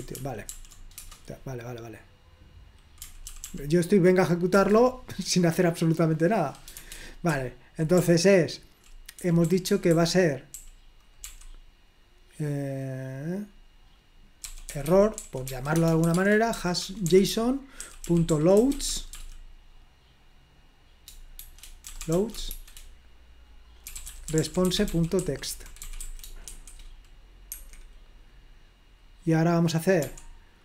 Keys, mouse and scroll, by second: 0.2 ctrl+p, 0.5 ctrl+p, 1.0 Return, 3.3 ctrl+p, 3.5 ctrl+p, 4.5 Return, 6.8-11.7 typing, 14.4-19.3 typing, 21.4-22.6 typing, 23.7-27.0 typing, 27.6 Escape, 30.0 o.